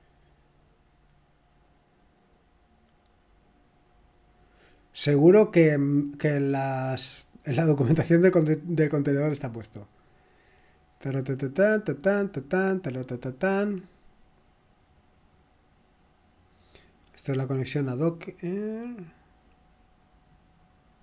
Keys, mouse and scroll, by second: 5.7-7.0 scroll down 3, 7.9-8.4 scroll down 2, 8.8-10.6 scroll down 3, 10.6-11.9 scroll down 2, 11.9-13.1 scroll down 1, 13.6-14.1 scroll down 2, 14.1-14.8 scroll down 1, 14.8-15.8 scroll down 1, 20.5-21.0 scroll down 3.